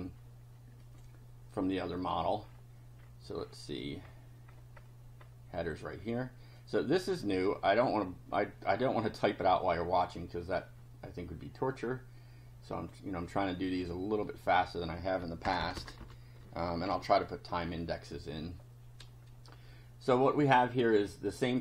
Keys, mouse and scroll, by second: 0.8 click, 1.9 click, 2.4-2.7 scroll down 1, 2.9-3.7 scroll down 2, 4.0-5.0 scroll up 2, 5.1 scroll up 1, 6.6-7.6 drag, 7.7 right click, 9.3 click, 12.7 click, 13.7 click, 14.4 click, 15.4 Return, 16.0 Up, 16.9 ctrl+v, 20.7 click.